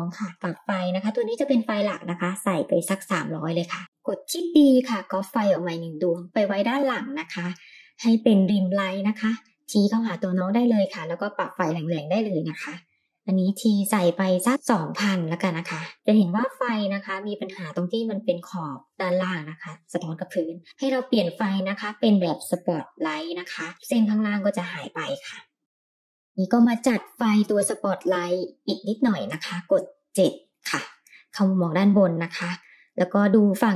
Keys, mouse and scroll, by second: 0.3-2.9 drag, 1.7 KP_0, 1.8 KP_0, 3.9 middle click, 3.9 click, 3.9 KP_7, 4.9 shift+d, 7.2 r, 11.1-15.4 drag, 12.1 KP_0, 12.2 KP_0, 13.2 Home, 13.3 Home, 14.5 Right, 14.5 BackSpace, 14.7 KP_0, 15.9 g, 15.9 r, 18.0-18.4 middle drag, 18.4-19.1 scroll up 3, 19.2-20.2 shift+middle drag, 22.2 click, 25.9-26.5 middle drag, 26.5 g, 29.0 Page_Down, 30.7 KP_7, 31.7 r, 33.3 g.